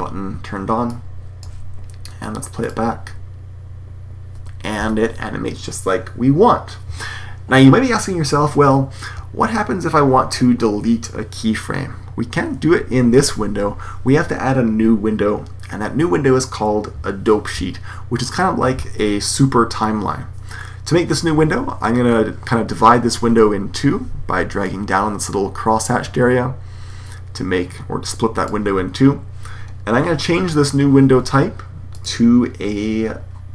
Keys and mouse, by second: 0.8 click, 4.7 Escape, 24.5-25.5 drag, 25.7 click, 25.8 click, 31.8-33.5 drag.